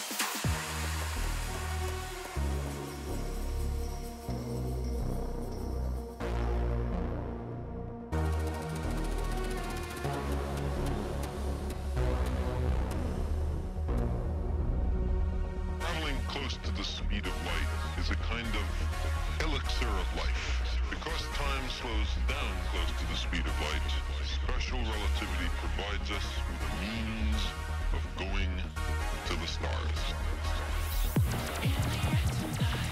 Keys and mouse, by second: 2.4 click, 2.9 click, 3.7 click, 4.9 click, 6.2 click, 6.8 Return, 7.2 click, 9.4-10.9 typing, 9.7 click, 10.2 click, 10.5 click, 12.4 click, 13.4 x, 13.7 click, 15.3 x, 15.7 click, 16.4 click, 21.8 click, 26.1 click, 28.9 click, 30.9 click, 32.6 click.